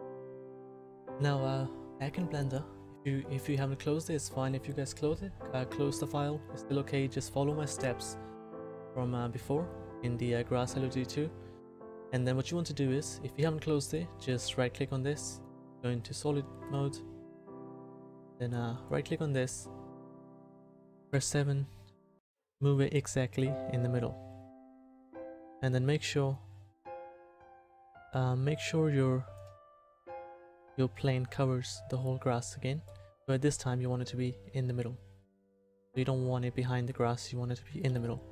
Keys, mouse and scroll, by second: 17.3-21.1 middle drag, 21.1 KP_7, 29.9 KP_1, 37.9 KP_1.